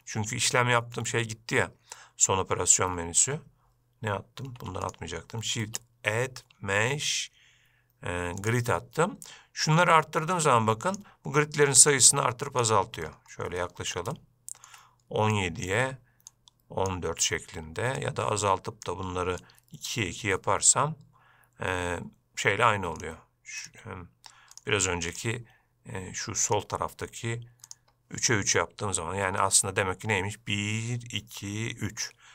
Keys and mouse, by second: 0.0 shift+a, 4.8 x, 10.1-11.2 drag, 12.2 click, 13.8-14.1 shift+middle drag, 14.4-14.9 ctrl+middle drag, 15.6 click, 16.6 click, 18.3 click, 19.7 click, 23.2-25.4 drag, 27.9 click.